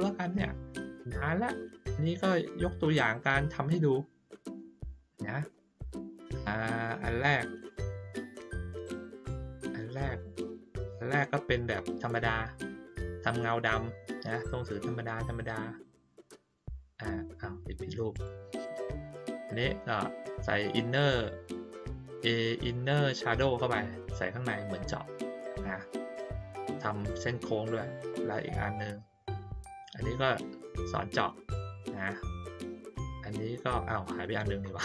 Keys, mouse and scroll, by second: 0.5 middle click, 1.3 ctrl+middle click, 2.1 middle click, 3.1-3.5 ctrl+scroll down 1, 3.9 middle click, 4.9 ctrl+middle click, 5.5 middle click, 6.0 ctrl+middle click, 7.5 click, 9.8 click, 10.0 click, 16.4 click, 18.1 click, 18.6 click, 28.7 click, 32.7 click.